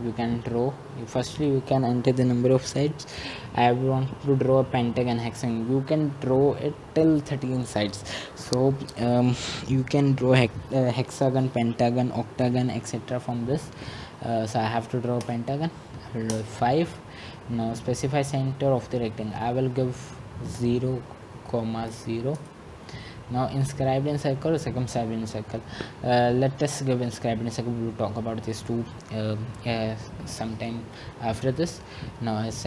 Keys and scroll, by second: 16.6 typing, 20.8 Return, 22.5-23.2 typing, 28.4-29.1 typing.